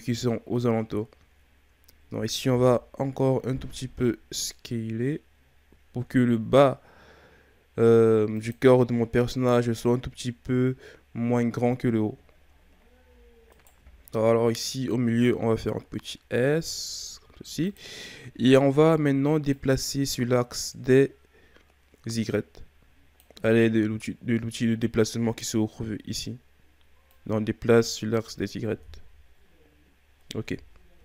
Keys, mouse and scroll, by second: 2.5 s, 13.5 alt+right click, 14.4 s, 18.4-19.5 scroll up 2, 19.5-22.7 drag, 27.1-28.8 drag, 28.8 KP_1, 30.4 KP_3.